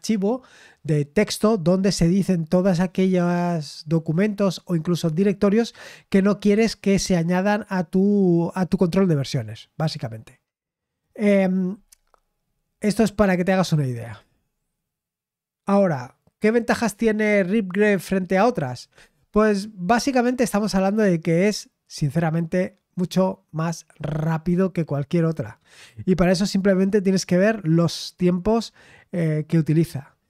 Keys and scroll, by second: 12.4-30.2 scroll down 1.